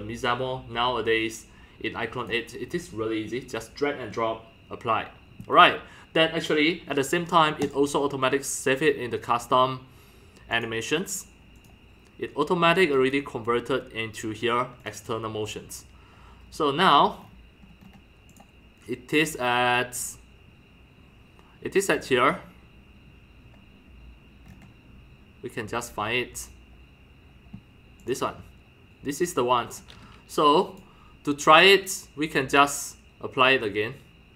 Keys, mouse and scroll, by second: 1.0-2.2 drag, 2.2 click, 2.4 click, 3.4 click, 6.1-7.3 drag, 7.7-10.4 drag, 11.5 click, 14.9 click, 16.4-18.0 scroll, 18.3 click, 18.4-23.4 drag, 24.4 middle click, 24.4 scroll down 1, 24.5 scroll, 28.0 drag, 29.6 middle click, 29.6-30.0 scroll, 30.4-30.8 scroll down 2, 30.8-34.3 drag.